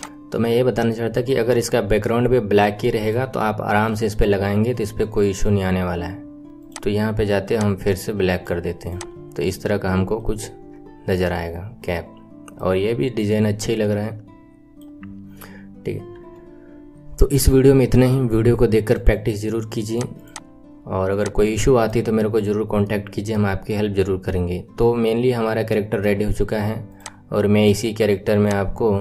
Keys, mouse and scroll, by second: 0.1-1.1 middle drag, 1.1-2.0 scroll up 3, 2.0-6.6 middle drag, 6.6-7.6 scroll down 5, 7.6 click, 9.1-9.6 scroll down 2, 9.6-10.2 scroll up 6, 10.2-12.8 middle drag, 12.8-13.2 scroll up 7, 13.4-15.0 middle drag, 15.0-15.7 scroll down 4, 15.7-16.1 scroll down 3, 16.1 KP_1, 17.5-18.1 scroll down 2, 20.1 right click, 20.5-21.4 scroll down 4, 21.6-22.1 shift+middle drag, 22.9-23.6 middle drag, 23.6-24.3 scroll up 6, 24.5-26.4 middle drag, 26.4 KP_1, 27.0 click, 28.3 click.